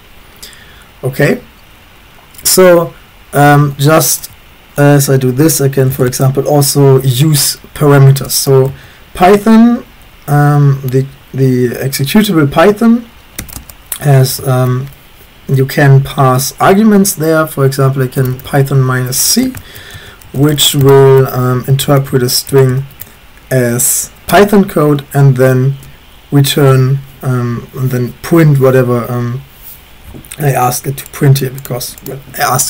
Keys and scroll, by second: 3.3-4.2 typing, 5.7-6.4 typing, 8.3-8.7 typing, 13.4-15.0 typing, 18.2-23.2 typing, 24.3 Return.